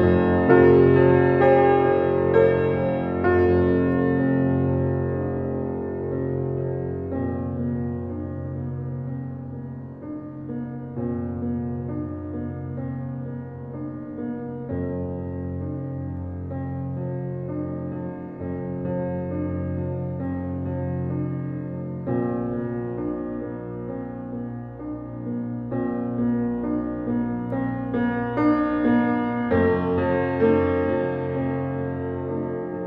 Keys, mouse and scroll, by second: 0.0 g, 1.8-2.9 shift+middle drag, 2.9 s, 4.9-6.6 middle drag, 6.6 click, 7.1 s, 8.0 s, 9.4-11.3 middle drag, 11.3 g, 12.2-13.5 middle drag, 13.5 click, 13.9-14.3 shift+middle drag, 14.3 shift+d, 15.2 scroll up 1, 15.5-18.5 typing, 19.4 middle drag, 19.7 scroll down 3, 20.0-21.3 middle drag, 21.3 click, 21.6 click, 22.0-23.1 middle drag, 23.4-24.1 shift+middle drag, 24.1 shift+d, 25.0 d, 25.2 s, 26.0 shift+a, 28.4 shift+middle click, 29.1 g, 31.1 shift+middle click, 31.5 click, 31.9 click, 32.7 g.